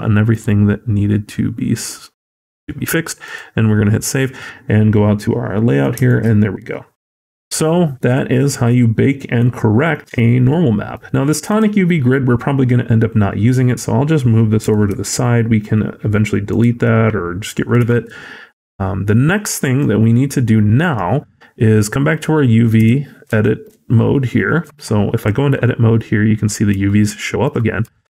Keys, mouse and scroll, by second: 20.3 ctrl+click.